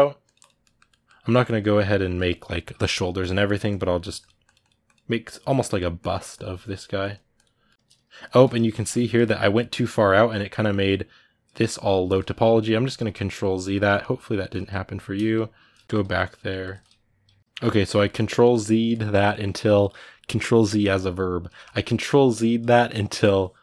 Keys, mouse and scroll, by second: 0.0 click, 0.4 middle click, 1.1-5.3 drag, 5.3 ctrl+middle click, 5.8-7.4 drag, 7.4-12.2 ctrl+middle drag, 12.2 ctrl+z, 13.0 ctrl+z, 13.9 ctrl+z, 14.6-15.8 ctrl+z, 16.0 ctrl+z, 16.3 middle click, 16.8-17.4 ctrl+z, 17.6-23.6 ctrl+middle drag.